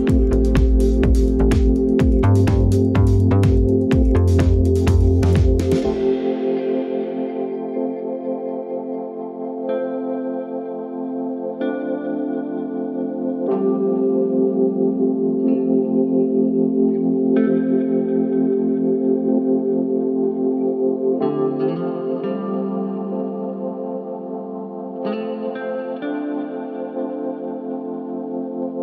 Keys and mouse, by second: 1.8 shift+click, 3.1 ctrl+p, 8.2 click, 9.0-10.3 drag, 10.5 ctrl+click, 12.5 ctrl+p, 15.2 click, 16.0 shift+click, 17.3 ctrl+p, 25.9 middle click, 26.8 click, 27.8-28.3 drag.